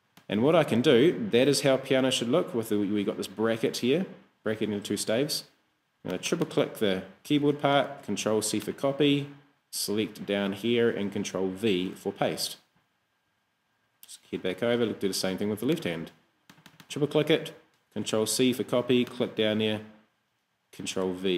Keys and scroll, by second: 8.2 super+c, 11.8 super+v, 17.9 super+c, 20.8 super+v.